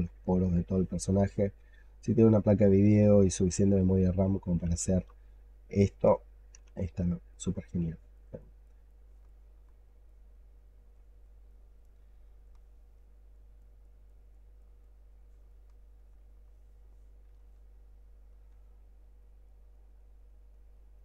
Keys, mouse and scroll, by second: 0.4 alt+middle click, 1.9 double click, 2.2 double click, 2.5 double click, 2.8 double click, 3.1 double click, 3.4 double click, 3.6 double click, 3.9 double click, 4.1 double click, 5.0 shift+right click, 7.2 double click, 7.4 double click, 7.7 double click, 8.0 double click, 8.2 double click, 8.5 double click, 8.8 double click, 9.2 alt+click, 10.0 double click, 10.2 double click, 10.5 double click, 10.8 double click, 11.1 double click, 11.3 double click, 15.4 alt+click, 16.2 alt+middle click, 17.2 shift+right click, 19.1 double click, 19.3 double click, 19.6 double click, 19.9 double click, 20.1 double click, 20.4 double click, 20.6 double click, 20.9 double click.